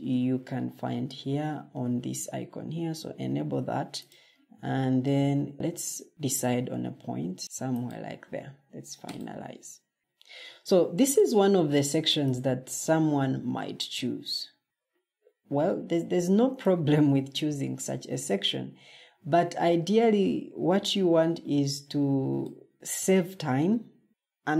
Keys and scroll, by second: 10.0 scroll.